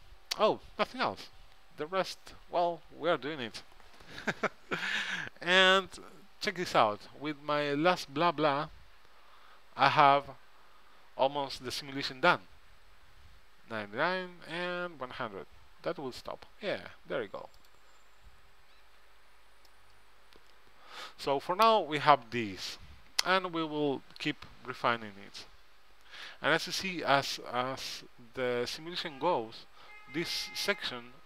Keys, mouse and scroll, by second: 17.7-19.5 drag, 19.8-21.7 middle drag.